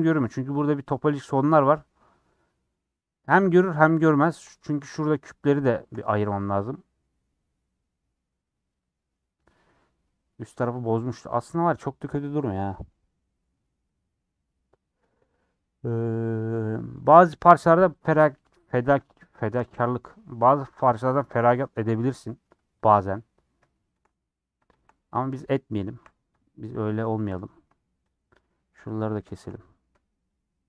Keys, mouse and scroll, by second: 0.5 scroll up 2, 4.1 middle click, 4.7 3, 5.4 click, 5.6-6.2 scroll down 3, 5.7 shift+middle click, 6.3-17.9 middle drag, 17.9 click, 18.5 middle click, 19.4 shift+click, 20.4-22.9 middle drag, 22.9 click, 23.2-24.8 middle drag, 24.8 shift+click, 25.3 middle click, 26.0 2, 26.4 Left, 27.3 middle click, 28.1 shift+Left, 28.3 shift+Left, 28.3 click, 29.1 shift+Left, 29.3 shift+Left, 29.3 click, 29.5 middle click, 30.3 shift+click.